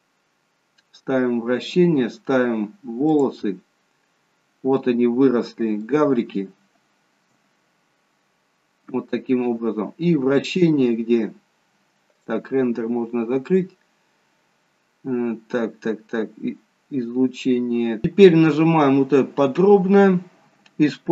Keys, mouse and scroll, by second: 1.0-2.2 scroll up 3, 2.2-3.3 scroll up 1, 3.3 click, 4.2-5.2 scroll up 2, 6.0 shift+middle click, 7.9-8.4 scroll up 1, 9.8-10.2 scroll down 4, 10.9 scroll down 1, 12.3 click, 15.9 scroll up 2.